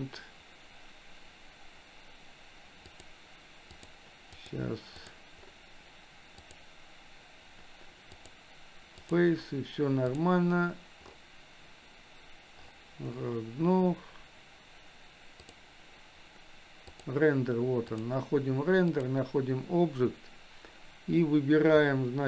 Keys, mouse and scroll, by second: 2.9 click, 3.8 click, 4.4 click, 5.0 click, 6.4 click, 8.3 click, 10.1 click, 15.4 click, 16.9 click, 18.0-19.1 drag.